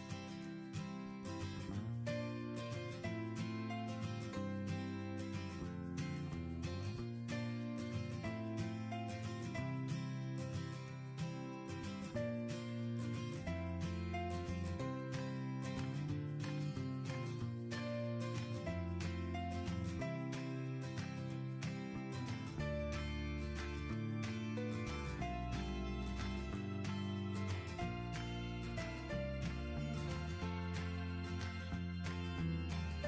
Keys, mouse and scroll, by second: 5.8 typing, 7.8 typing, 8.3 Return, 21.9 typing, 22.5 Return, 29.0 typing, 29.5 Return.